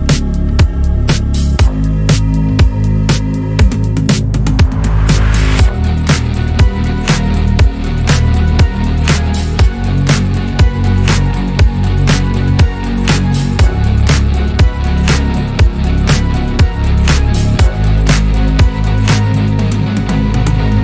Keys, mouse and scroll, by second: 2.1 scroll down 3, 2.3-4.0 middle drag, 4.0 scroll up 1, 4.5-6.1 middle drag, 6.1 click, 6.8 KP_1, 7.6 scroll up 1, 8.1-9.1 shift+middle drag, 9.1 drag, 9.6 click, 11.0 Tab, 12.0 a, 12.6 alt+s, 16.6 Tab, 17.1 s, 19.3 click, 19.5 scroll down 5, 19.6-20.2 middle drag, 20.2 scroll down 1, 20.3-20.8 middle drag.